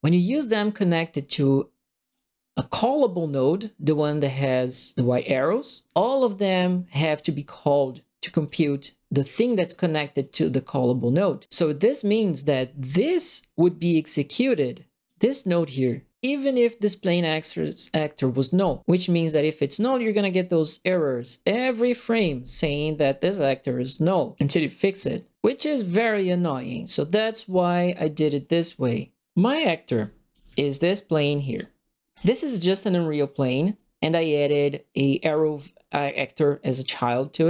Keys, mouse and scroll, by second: 0.2 right click, 0.7 right click, 2.0 click, 2.1 right click, 2.8 click, 3.8 click, 6.2 click, 7.1 right click, 8.4 click, 10.2 right click, 11.4 right click, 11.8 click, 13.0-14.4 drag, 15.0 click, 17.0 click, 23.6 click, 27.2 click, 27.5 right click, 27.9 right click, 28.4 right click, 29.7-31.5 right drag, 29.8-31.7 typing, 32.1 middle click, 33.2 right click, 33.4 q, 35.2 click.